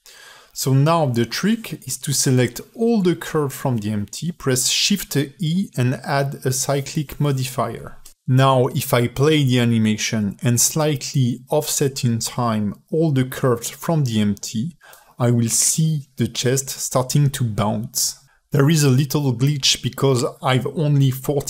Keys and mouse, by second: 0.2 ctrl+alt+middle click, 1.5 click, 2.9 shift+a, 3.7 shift+e, 11.3 ctrl+alt+middle click, 12.2 space, 13.4 a, 14.3 g.